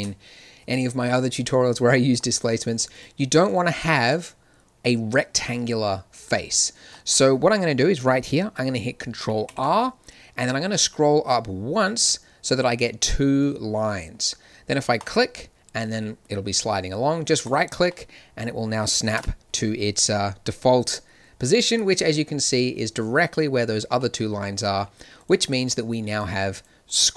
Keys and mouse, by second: 2.5 click, 4.1-9.1 drag, 9.4 ctrl+r, 17.8-19.1 drag, 19.1 KP_1, 21.4 z, 24.4 z.